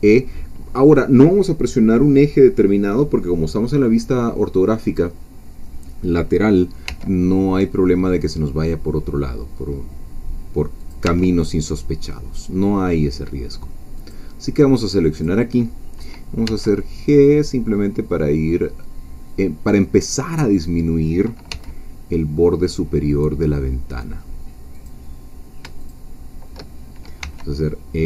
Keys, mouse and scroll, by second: 6.9 e, 10.8 click, 11.0 e, 14.0 click, 15.2-16.4 drag, 16.4 g, 19.3-20.8 drag, 21.5 g, 24.7 click, 25.9 shift+click, 27.2 e.